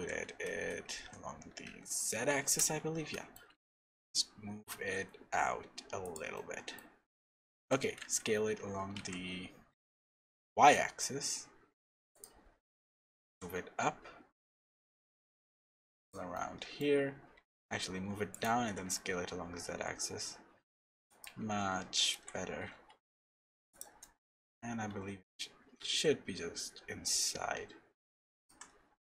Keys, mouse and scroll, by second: 3.1 middle click, 3.4 g, 6.3 middle click, 7.0-7.4 scroll up 2, 7.4 shift+middle click, 7.8 s, 9.0-9.4 scroll down 1, 9.7 s, 16.3 middle click, 17.3 g, 18.6 s, 24.0 middle click, 24.5-26.2 scroll up 3, 24.9 g, 28.7-29.1 scroll down 2.